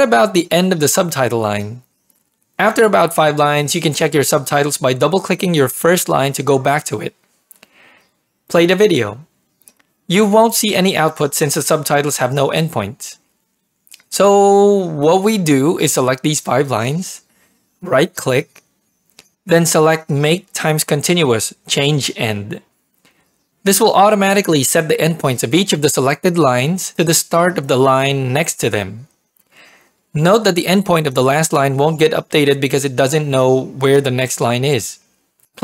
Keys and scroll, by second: 0.3 Return, 6.7 ctrl+p, 14.8 ctrl+[.